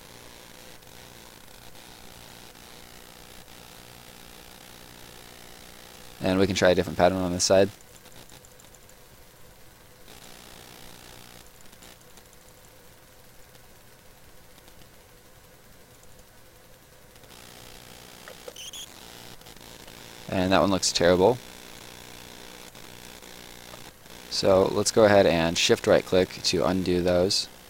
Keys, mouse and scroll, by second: 2.4 middle click, 3.4 middle click, 3.6 click, 7.2 click, 13.0 right click, 15.9 click, 18.3 space, 19.4 right click, 20.2 ctrl+right click, 21.7 click, 23.7 ctrl+click, 23.8 ctrl+z, 25.3 shift+right click, 26.9 shift+right click.